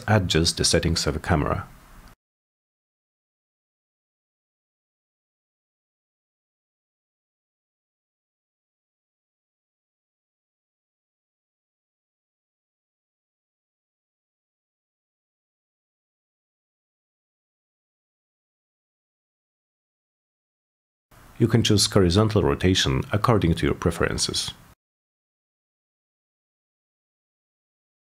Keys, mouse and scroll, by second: 0.6 click, 2.6 Return, 6.8 click, 6.9 click, 8.4 Return, 12.8-13.5 drag, 14.9 click, 15.7 m, 17.2 click, 18.0 click, 18.9 click, 20.1 click, 21.3 click, 21.4 click, 23.1 click, 23.1 click, 23.4 4, 24.8-28.1 typing, 25.9 Return.